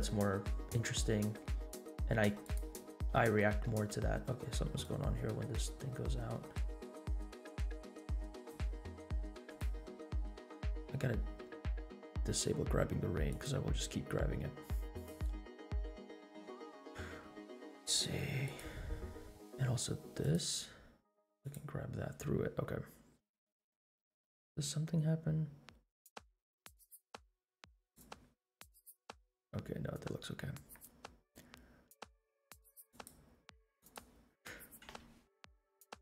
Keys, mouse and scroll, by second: 3.9 space, 4.9-9.1 drag, 9.4 click, 11.4-12.3 scroll down 5, 13.5 click, 13.5 scroll down 1, 14.9 click, 18.4 click, 20.4 click, 21.4 click, 23.5-28.5 drag, 28.6 scroll up 2, 29.5-30.7 scroll down 3, 33.1 click, 33.9-34.4 drag, 35.0 space.